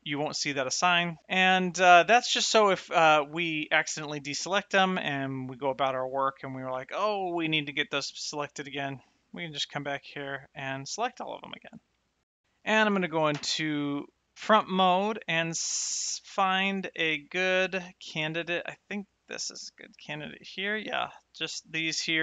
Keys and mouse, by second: 0.8 Tab, 1.5 shift+middle click, 3.5 click, 8.7 click, 13.0 shift+middle click, 13.3 KP_1, 16.7 shift+middle click, 18.2 shift+middle click, 19.4 shift+middle click.